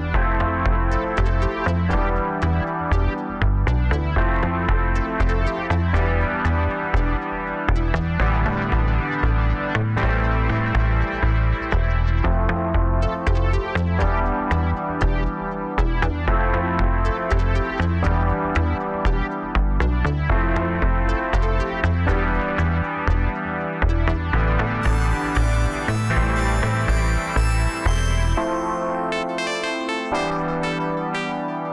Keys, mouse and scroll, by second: 0.0-3.0 middle drag, 4.2-5.7 scroll up 2, 5.7 click, 6.3 scroll up 2, 7.2 Tab, 7.7-8.6 scroll up 1, 8.7 click, 9.2 scroll up 1, 9.5 scroll down 2, 9.9-11.1 middle drag, 11.1 e, 13.5-14.1 scroll down 2, 14.1-15.2 middle drag, 15.2-15.5 scroll down 3, 15.5-16.8 middle drag, 16.8 KP_0, 18.4 click, 19.5 click, 20.0-21.7 scroll down 1, 21.7 Tab, 22.2 scroll up 1, 25.0-27.4 drag, 27.4 s, 29.4 KP_0, 30.9 g.